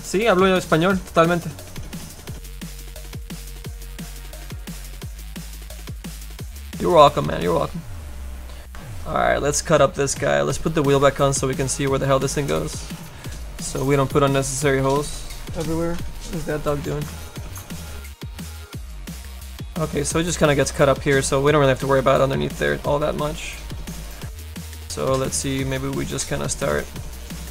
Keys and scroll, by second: 25.4 s.